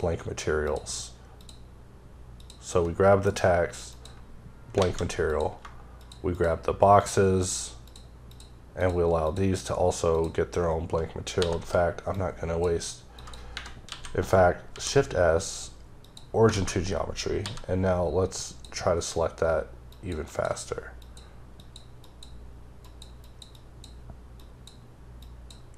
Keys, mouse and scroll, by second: 0.7 shift+double click, 1.4 shift+click, 2.4 shift+click, 3.3 alt+m, 3.9 click, 4.8 alt+a, 5.1 scroll down 1, 5.3 click, 6.4 shift+double click, 7.0 shift+click, 7.5 shift+click, 7.9 shift+double click, 8.3 shift+click, 8.8 shift+click, 9.3 shift+double click, 10.2 shift+click, 11.4 c, 11.7-12.2 scroll up 3, 12.2 click, 12.9 scroll up 3, 13.2 click, 13.6 ⊘, 16.1 click, 16.6 a, 17.8-18.5 scroll up 1, 18.5 click, 19.2-19.9 scroll up 3, 19.9 click, 20.3 double click, 21.0 click, 21.6 click, 22.1 click, 23.2 click, 23.6 double click, 24.4 click, 25.2 click.